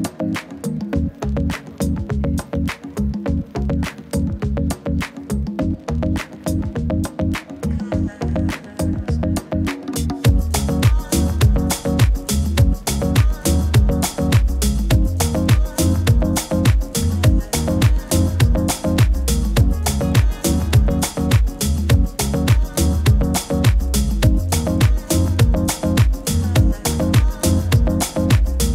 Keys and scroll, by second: 0.9 super++, 1.0 super++, 1.2 super++.